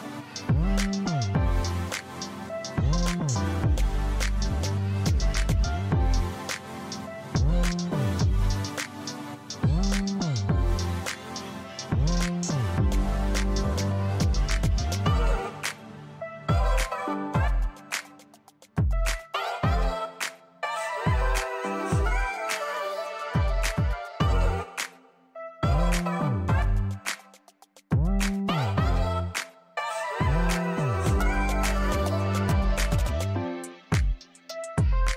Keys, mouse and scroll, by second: 0.2 KP_Enter, 1.0-1.5 scroll up 1, 1.5 click, 2.5 click, 3.3 scroll down 1, 3.7 click, 5.0 scroll up 1, 5.5 middle click, 6.0-6.3 scroll up 1, 6.5 alt+middle click, 8.5-8.8 scroll down 1, 9.0 click, 10.5 q, 11.2 scroll down 1.